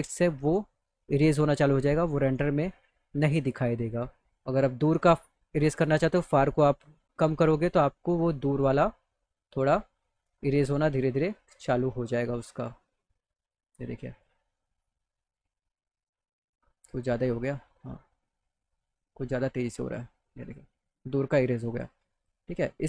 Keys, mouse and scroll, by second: 0.7-2.4 drag, 3.6 click, 5.2-9.8 drag, 13.9 click, 15.2-20.2 drag, 21.8 click.